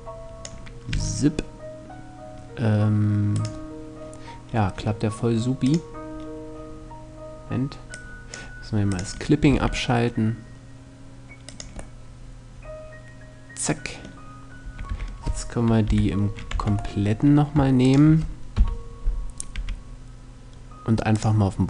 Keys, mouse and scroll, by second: 0.5 r, 3.1-4.7 right drag, 4.7 middle click, 5.3-7.1 drag, 7.5-10.3 drag, 9.1 r, 11.2-12.6 drag, 12.6-13.6 middle drag, 14.3 a, 14.5 a, 15.5 KP_3, 16.2 Tab, 16.6 middle click, 17.5 right click, 18.2 KP_1, 19.1 r, 20.8-21.6 drag.